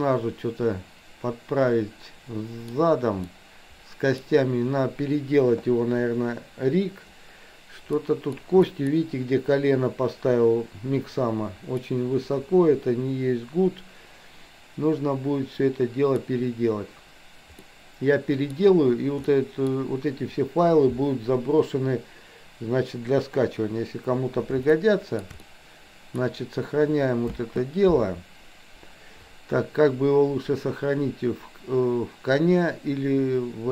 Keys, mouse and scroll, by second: 3.4-4.5 middle drag, 8.0 middle click, 8.4 scroll down 1, 8.8 middle click, 11.9-16.4 middle drag, 17.8 middle click, 19.4 middle click, 24.9-25.3 shift+middle drag, 25.4-26.4 middle drag, 27.4 space.